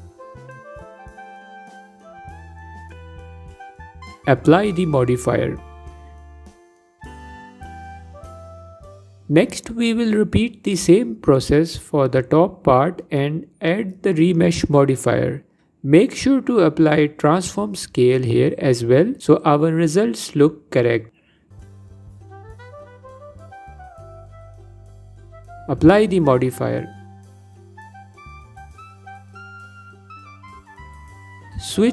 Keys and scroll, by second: 17.9 ctrl+a, 21.8 F4, 22.3 F4, 31.3 Tab.